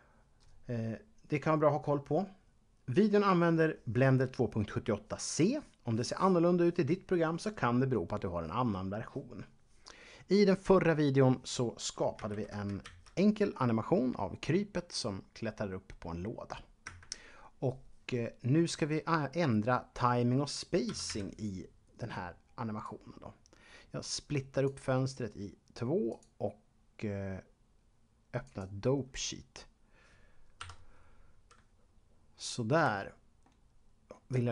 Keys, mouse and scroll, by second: 12.3 shift+Left, 13.4 a, 16.8 Escape, 20.7-21.6 typing, 22.8 click, 26.1 click, 28.4 click, 30.6 Home, 32.4-32.8 scroll up 2, 33.4 shift+middle click.